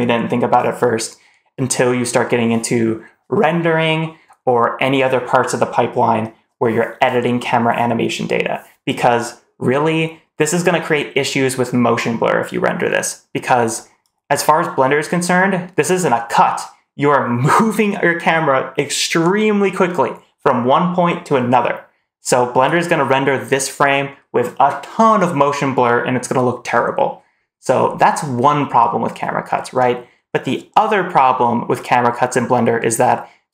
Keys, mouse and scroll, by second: 13.9 click, 33.4-33.5 drag.